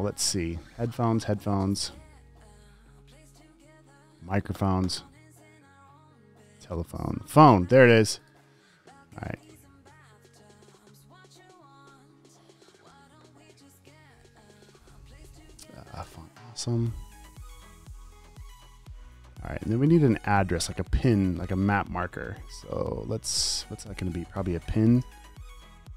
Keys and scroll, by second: 0.0-0.1 typing, 9.4 super+c, 10.7 super+v, 11.8 space, 16.0-16.9 typing, 24.1 super+a, 25.1-25.8 typing.